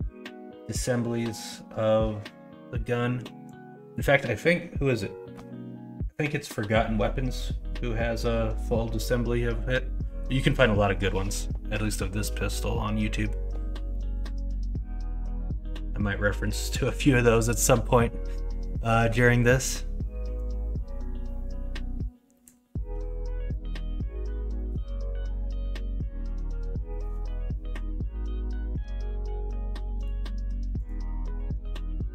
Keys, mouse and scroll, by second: 29.4 Tab.